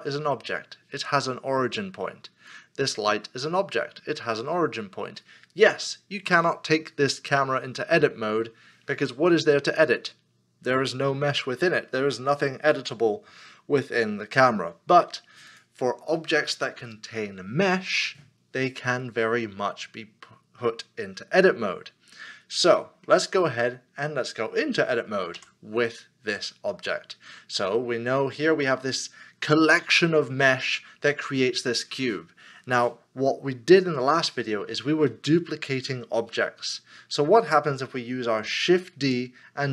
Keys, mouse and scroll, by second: 22.8 middle click, 23.3 scroll up 1, 25.3 Tab, 26.9 Tab, 27.0 middle click, 27.9 scroll down 1.